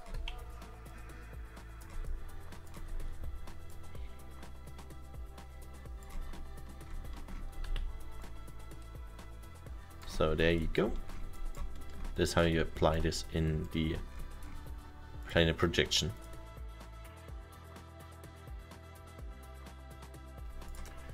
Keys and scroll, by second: 0.3 e, 3.1 r, 8.2 w, 11.9 alt+7.